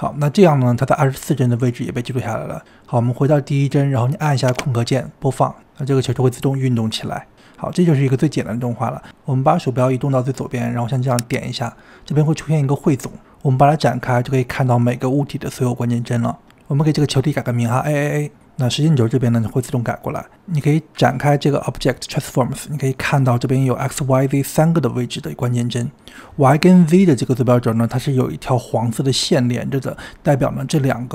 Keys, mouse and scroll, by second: 1.0-4.8 drag, 4.8 space, 6.1 space, 11.0-12.5 drag, 13.5 click, 14.9 click, 15.8 click, 16.4 a, 16.5 a, 20.1 click, 21.3 click, 26.8-29.8 drag.